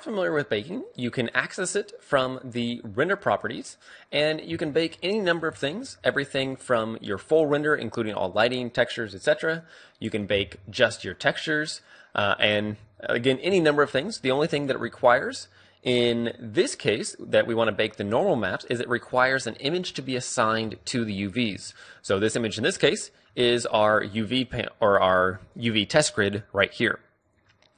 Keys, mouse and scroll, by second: 0.1-4.8 drag, 4.8-6.7 middle drag, 18.5 a, 21.8 Tab.